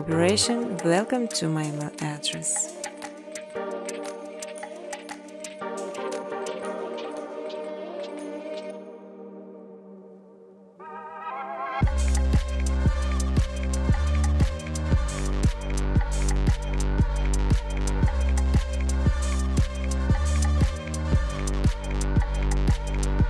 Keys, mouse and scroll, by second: 0.7 click, 1.2 click, 1.4 right click, 2.7 click, 3.8 click, 4.2 click, 5.3-6.6 typing, 8.5 click, 8.7 click, 10.0 click, 10.3-11.1 typing, 12.8 3, 13.9 Return, 14.7-15.6 typing, 16.2 click, 17.4 click, 18.9-20.4 typing.